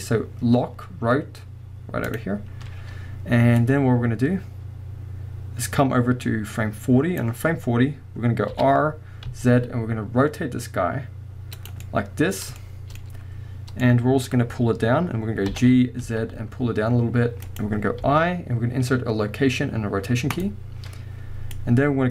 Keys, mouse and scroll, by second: 3.6-11.7 drag, 8.5 r, 11.8-17.6 middle drag, 13.0-13.8 scroll up 2, 15.5 g, 17.6-18.0 drag, 21.5-22.1 drag.